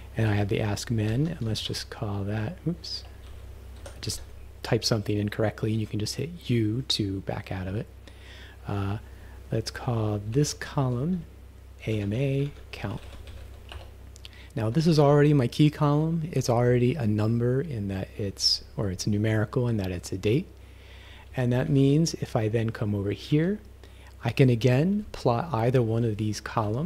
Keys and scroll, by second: 0.3 Right, 0.9-2.2 typing, 3.3 shift+u, 9.1 Right, 10.2 Left, 10.3 Right, 10.8-13.9 typing, 14.7 Left, 21.2 Right, 21.7 shift+-, 23.3 Left, 26.7 ..